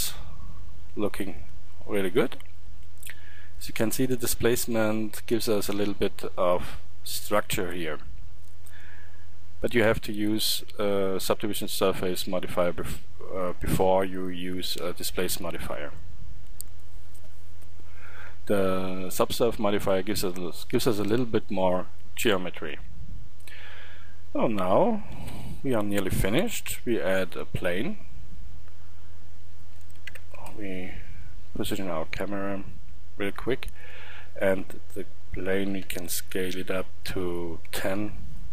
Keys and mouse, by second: 1.3-1.7 middle drag, 3.7-25.1 middle drag, 25.1 shift+a, 30.1 ctrl+alt+KP_0, 32.0 g, 35.5 click, 35.9 s.